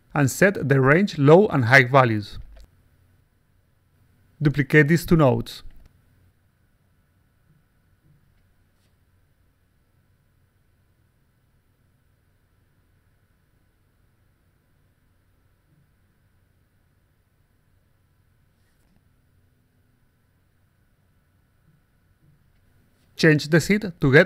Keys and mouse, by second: 0.5 click, 1.4 click, 2.1 click, 2.8 click, 3.6-3.9 alt+drag, 4.9 click, 5.6 shift+click, 6.4-7.5 shift+drag, 7.6 click, 8.3 click, 9.1 click, 9.9 click, 10.9 click, 11.4-12.5 typing, 14.6-15.5 typing, 16.4 click, 17.3 click, 18.8-20.9 typing, 22.2 3, 22.7 4.